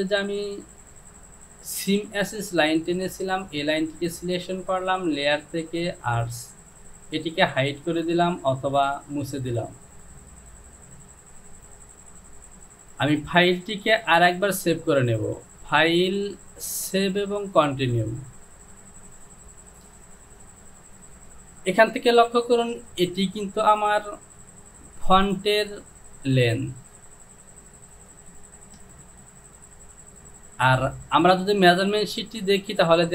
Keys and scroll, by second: 11.6 Home, 14.1 Delete.